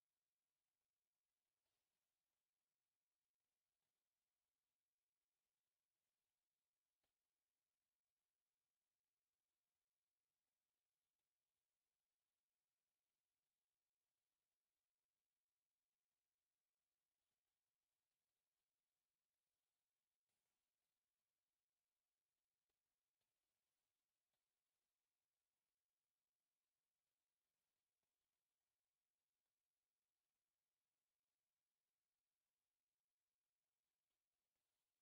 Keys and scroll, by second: 0.7 Escape, 1.0 e, 1.3 space, 2.2 Escape, 17.9 Escape, 18.4 e, 18.5 space, 19.3 u, 19.4 space, 20.9-22.7 typing, 21.6 Escape, 22.4 Escape, 23.7 Escape, 23.8 e, 23.9 space, 24.2 Escape, 24.5 t, 24.6 space, 25.1 Escape, 27.5 Escape.